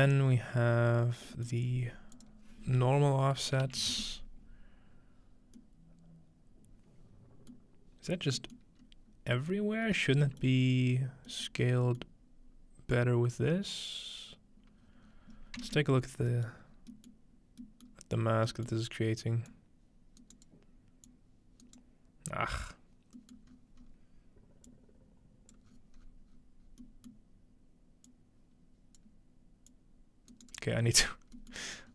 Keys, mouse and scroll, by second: 0.8 scroll up 2, 1.6-2.2 scroll up 2, 2.2-3.7 drag, 3.7-4.4 typing, 5.6-7.5 middle drag, 7.5 middle click, 8.1-8.8 scroll down 2, 8.6 middle click, 8.8 scroll up 2, 10.0-11.3 scroll up 2, 11.3-14.1 scroll up 2, 12.9 click, 14.8-17.1 scroll down 6, 16.5-17.7 ctrl+middle drag, 17.9-18.5 middle drag, 18.3 scroll down 2, 18.7-19.6 middle drag, 19.5-23.8 drag, 19.6-20.2 scroll down 1, 20.2-23.6 right drag, 23.4 middle click, 23.5-24.5 scroll up 2, 24.5 scroll up 1, 24.7 click, 25.7-28.1 scroll down 3, 26.7 click, 27.1-29.0 middle drag, 28.1-31.0 drag, 28.1-28.5 scroll down 1, 30.3 right click, 31.0-31.9 scroll up 1.